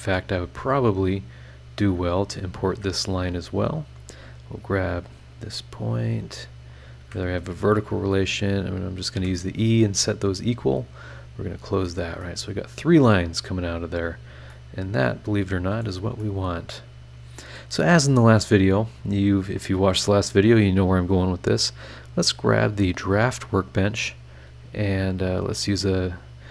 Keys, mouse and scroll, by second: 0.0 Escape, 1.4 click, 2.2 click, 2.7 Escape, 3.7 click, 5.0 click, 6.7 click, 7.0 Escape, 8.0 click, 9.0 click, 9.1 e, 9.6 scroll down 1, 10.4 scroll down 1, 11.1 click, 11.8 scroll down 1, 12.2-13.2 middle drag, 12.3 click, 12.3 right click, 13.2-14.3 scroll down 6, 14.5-16.0 middle drag, 14.5-16.0 drag, 16.2 middle click, 16.2-17.7 drag, 18.2 scroll up 1, 21.5 click, 22.7 click, 24.9 click.